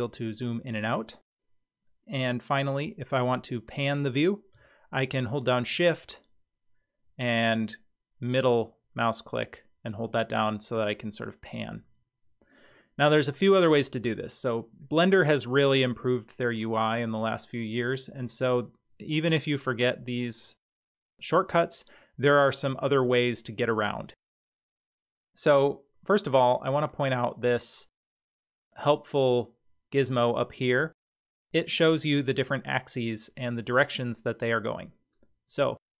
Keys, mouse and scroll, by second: 5.7-11.7 shift+middle drag.